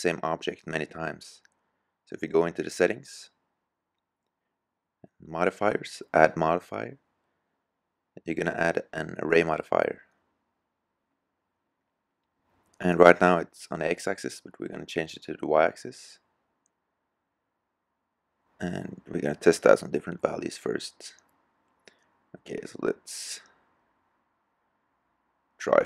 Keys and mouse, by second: 3.3-5.0 middle drag, 11.0-12.2 middle drag, 13.0-14.9 drag, 16.4-18.3 drag, 23.1 click.